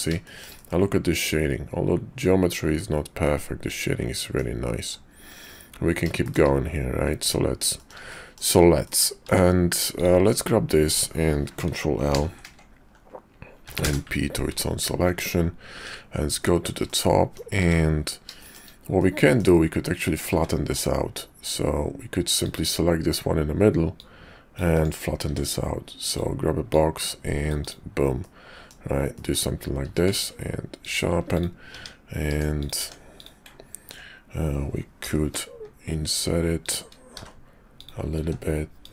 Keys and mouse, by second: 0.2 shift+middle click, 0.6-4.4 middle drag, 5.1 `, 6.2 shift+middle click, 7.8 shift+middle click, 8.1 middle click, 8.7 middle click, 9.2 Tab, 12.0 ctrl+l, 13.6 p, 15.0 Tab, 15.6 `, 16.8 middle click, 17.5 `, 18.4 shift+middle click, 18.9 middle click, 20.3 `, 22.3 click, 23.9 click, 25.3 d, 26.7-27.7 drag, 28.2 middle click, 29.2 middle click, 29.9 q, 31.3 click, 31.7 Tab, 32.3 Tab, 32.6 click, 32.8 Tab, 33.2 click, 35.0 i, 37.1 e, 38.2 s.